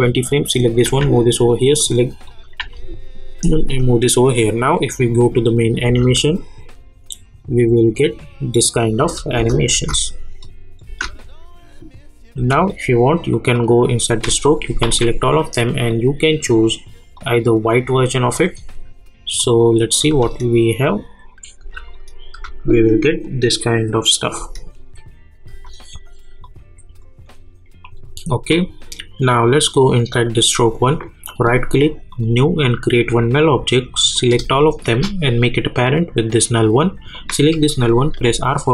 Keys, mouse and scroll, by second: 0.8 [, 1.4 click, 4.2 click, 5.8 space, 9.0 space, 10.4 click, 10.8 space, 13.3 click, 14.8 ctrl+a, 15.9 click, 20.1 space, 21.9 click, 22.3 space, 25.4 space, 26.4-27.8 drag, 30.2 click, 31.3 right click, 32.1 click, 35.9 click, 38.1 r.